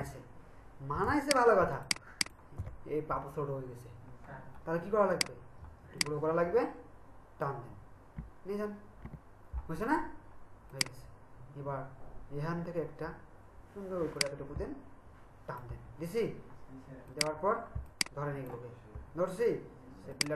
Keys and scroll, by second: 1.1 ctrl+alt+space, 8.2 Right.